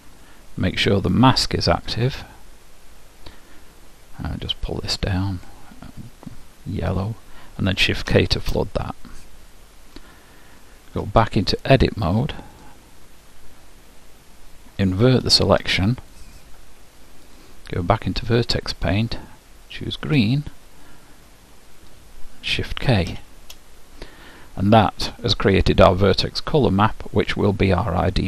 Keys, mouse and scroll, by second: 1.8-3.7 drag, 4.9-8.2 drag, 8.2 shift+k, 12.7 click, 15.4 ctrl+i, 18.3-19.3 drag, 19.7-22.8 drag, 23.2 shift+k.